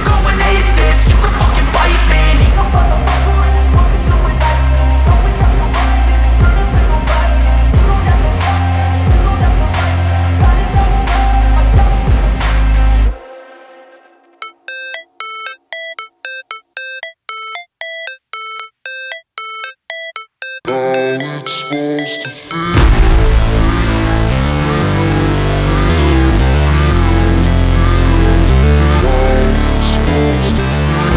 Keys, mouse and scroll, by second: 0.8 click, 5.4 click, 10.1-12.0 typing, 10.4 click, 11.0 click, 11.4 click, 11.7 click, 13.6 click, 19.7 click, 23.1 click, 25.2 click, 28.9 click, 29.1 space, 29.3 click, 29.6 space.